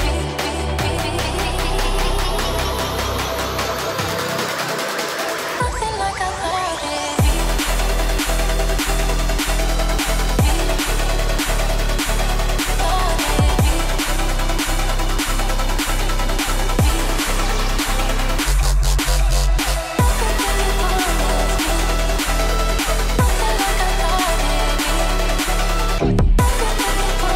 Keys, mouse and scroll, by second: 0.0 double click, 2.7 right click, 4.0 double click, 8.3 double click, 8.6 shift+click, 8.9 shift+right click, 12.6 ctrl+click, 14.3 right click, 15.1 F2, 15.9 right click, 17.2 scroll down 1, 17.6 alt+click, 17.9 alt+right click, 20.4 double click, 20.6 shift+F2, 21.9 double click, 24.9 ctrl+k.